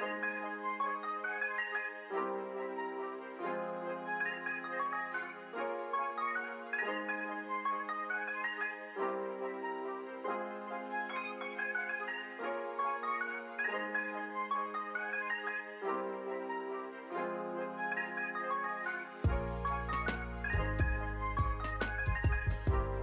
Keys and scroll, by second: 0.5 2, 1.2 shift+0, 2.2 Return, 2.9 space, 5.3 space, 7.2 ctrl+c, 9.1 ctrl+v, 12.4 ctrl+v, 14.8 ctrl+v, 16.9 ctrl+v, 17.5 space, 19.3 space, 19.6 ctrl+s.